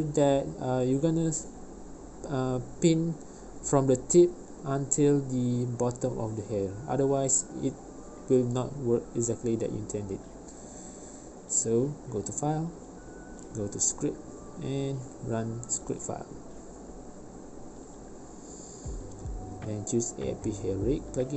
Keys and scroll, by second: 3.8 ctrl+p, 10.9 v.